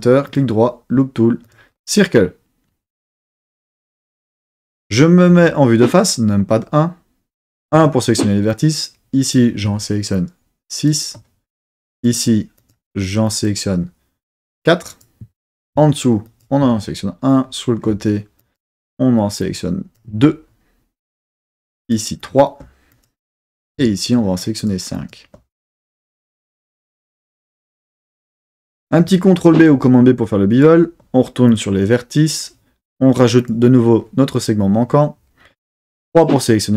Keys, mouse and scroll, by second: 0.2-2.3 right drag, 5.3 KP_1, 7.7 1, 8.5-9.4 drag, 10.2-10.9 shift+drag, 11.8 shift+click, 12.6 shift+click, 13.2 shift+click, 14.2 shift+click, 14.8 shift+click, 16.3 shift+click, 18.4 shift+click, 19.4 shift+click, 21.8 shift+click, 22.2 shift+click, 22.9 shift+click, 24.4 shift+drag, 25.0 shift+click, 25.7 shift+click, 26.5 shift+click, 27.2 shift+click, 29.4 super+b, 30.5 click, 31.5 click, 33.3 click, 36.0 3.